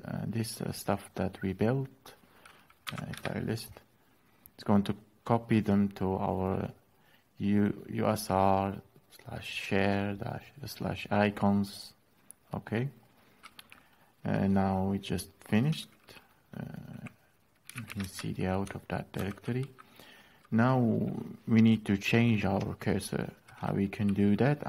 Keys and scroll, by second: 2.6 typing, 2.8 Return, 17.2-18.1 typing, 18.9 ctrl+l.